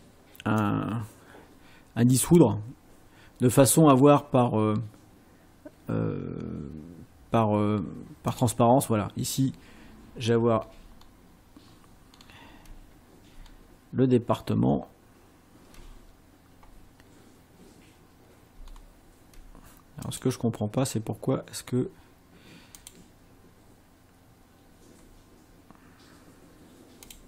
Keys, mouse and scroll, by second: 0.7-2.5 drag, 8.3 click, 12.1 ctrl+scroll down 2, 13.4 ctrl+scroll down 2, 14.7 ctrl+scroll down 2, 18.7-19.0 ctrl+scroll down 2, 20.1 click, 22.9 click, 27.1 click.